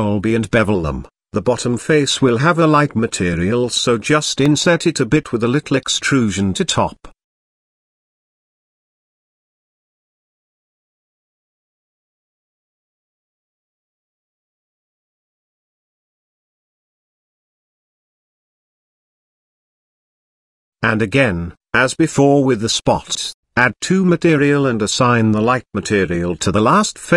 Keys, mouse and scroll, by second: 0.1 alt+shift+click, 0.6 middle click, 1.7 ctrl+b, 4.7 Tab, 5.1-5.4 middle drag, 6.1 Tab, 6.7 click, 7.1 click, 8.0 i, 10.1 e, 13.9 middle click, 14.4 KP_0, 16.7 middle click, 17.6 shift+middle click, 18.6-20.2 middle drag, 20.9 shift+middle click, 21.8 middle click, 23.6 Tab, 24.2 click, 24.9-26.3 drag, 26.6-27.1 drag.